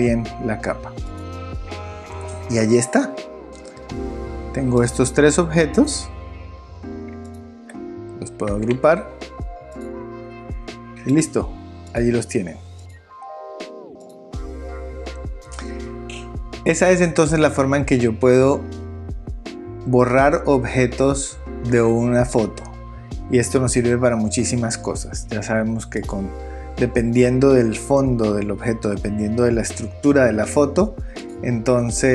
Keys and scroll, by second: 8.5 super+g.